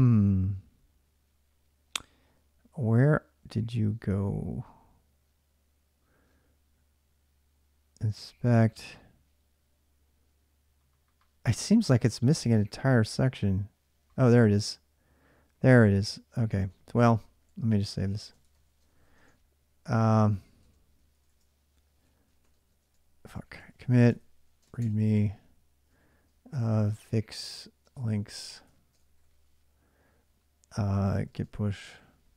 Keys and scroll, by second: 16.3 alt+Tab, 18.0-24.4 typing, 24.6 Tab, 24.9 Return, 26.2-28.9 typing, 30.6-32.0 typing.